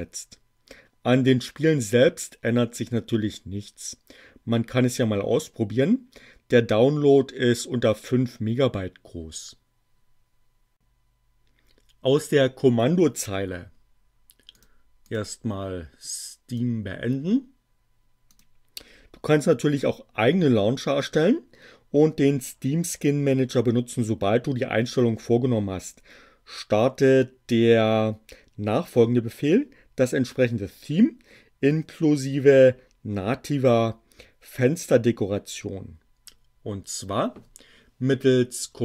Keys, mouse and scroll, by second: 14.5 click, 15.0 click, 16.5 click, 18.3 click, 38.2 BackSpace.